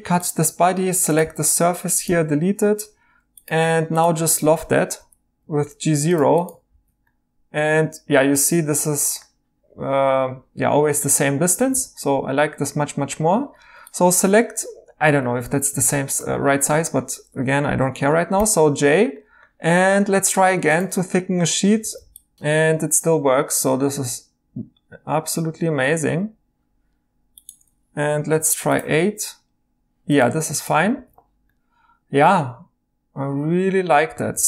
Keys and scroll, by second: 0.0-1.3 typing, 4.9 l, 6.7 typing, 10.8 e, 11.7 e, 13.6 Tab, 15.1 e, 18.3 j, 21.8 e, 28.0 8, 30.9 e, 34.3 e.